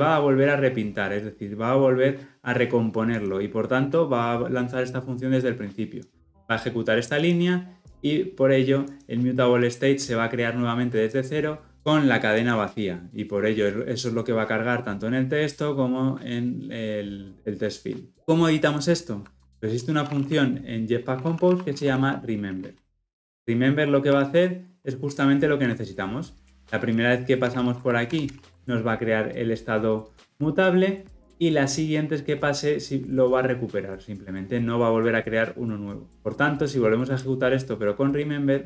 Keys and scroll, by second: 24.2 alt+Return, 25.0 Delete, 28.2 ctrl+alt+o, 37.1 shift+F10.